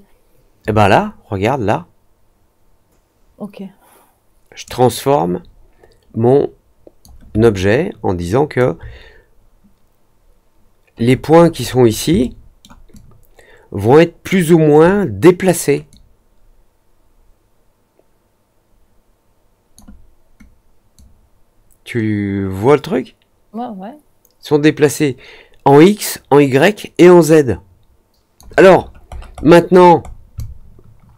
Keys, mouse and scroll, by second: 7.5-8.5 alt+drag, 11.0-12.0 scroll up 4, 12.1 alt+middle click, 12.9-14.2 alt+drag, 15.8-19.7 drag, 20.9-28.3 drag, 28.7 middle click, 29.0 middle click, 29.3 middle click, 29.7 middle click, 30.0 middle click, 30.3-31.1 alt+drag.